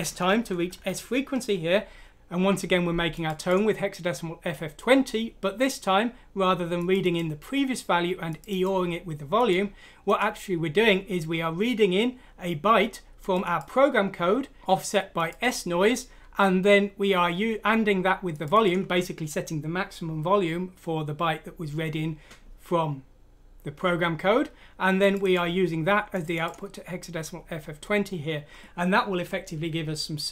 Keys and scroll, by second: 0.0 shift+Home, 0.3 shift+Down, 0.5 shift+Down, 0.7 shift+Down, 0.9 shift+Down.